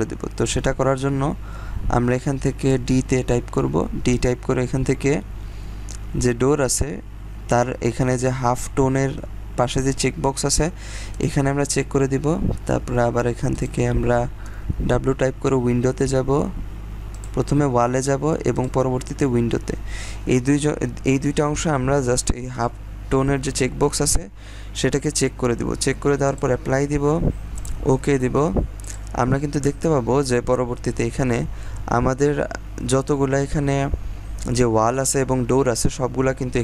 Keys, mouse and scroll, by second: 0.2-2.2 scroll down 1, 2.7 d, 11.0 click, 13.5 click, 15.5-16.0 scroll down 1, 15.5 typing, 17.0 click, 24.9 click, 29.7-30.2 scroll down 1, 30.2-31.0 scroll up 1, 31.7-32.8 scroll down 1, 32.8 scroll up 1, 33.0-33.6 scroll down 1, 33.6-34.2 scroll up 1, 34.6-35.5 scroll down 1, 35.5-36.2 scroll up 1, 36.2-36.6 scroll down 1.